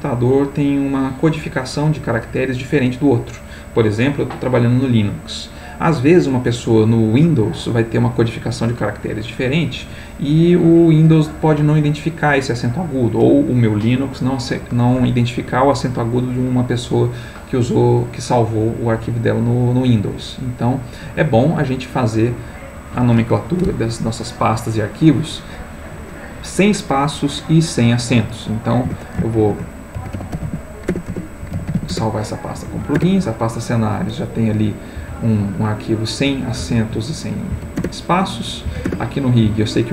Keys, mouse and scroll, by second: 20.7 click, 22.7 click, 28.8 F2, 29.4-31.7 typing, 31.9 shift+Return, 32.6 Up, 33.0 Return, 35.0 Down, 36.6 alt+Left, 37.5 Down, 37.8 Return, 38.7 Down, 38.9 Return, 39.4 Down.